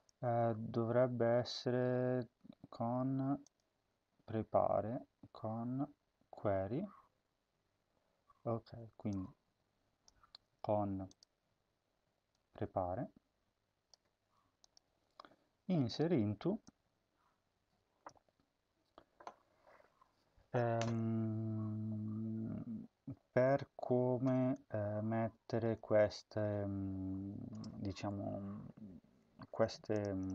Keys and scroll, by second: 10.0 ctrl+c.